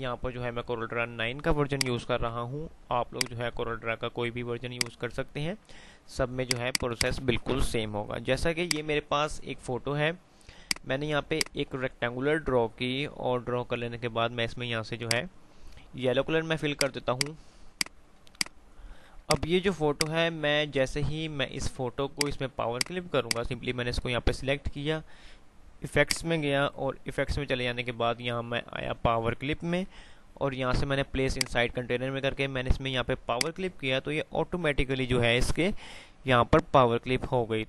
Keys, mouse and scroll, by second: 1.6 F5, 1.9 click, 2.4 F2, 3.2 click, 3.4 F2, 4.8 click, 5.1 F2, 6.2 click, 7.4 F3, 10.6-19.4 drag, 19.9 F2, 20.3 F2, 22.2 click, 26.1 click, 30.7 F5, 31.1 typing, 31.4 click, 36.1 typing.